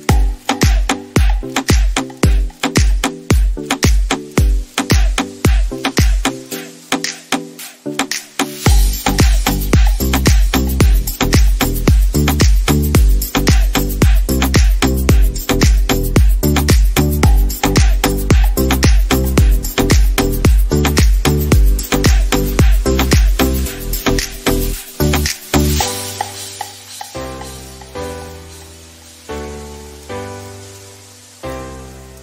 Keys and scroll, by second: 27.8 ctrl+z.